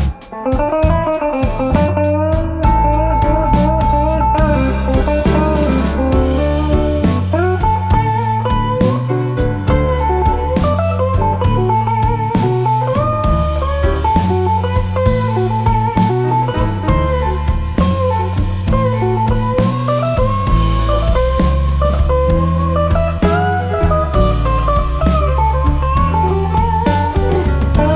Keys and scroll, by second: 16.8 ctrl+z, 21.8 ctrl+z, 22.7 ctrl+z.